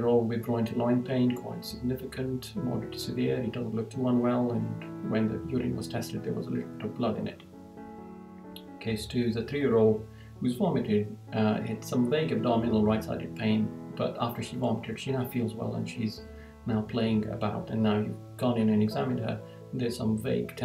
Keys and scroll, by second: 0.5 Right, 2.2 Right, 3.6 Right, 7.2 Right.